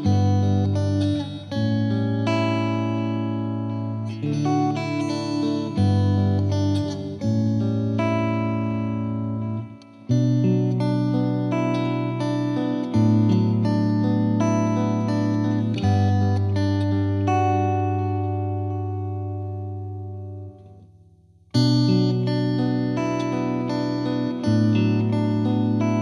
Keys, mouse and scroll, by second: 0.0-0.6 scroll down 1, 0.7 scroll down 1, 1.0-2.2 drag, 2.3 click, 2.4 space, 3.4 space, 3.5-4.4 middle drag, 4.4 click, 4.5-5.8 middle drag, 7.9 click, 8.1-9.8 scroll down 10, 10.1-11.2 drag, 12.6 scroll up 2, 12.9-14.1 drag, 18.3-18.8 scroll up 2, 19.0-20.2 drag, 21.1 scroll down 11, 21.6-22.7 drag, 22.7 middle click, 22.9-24.1 scroll down 1, 24.7-25.7 scroll up 11, 25.7-26.0 drag.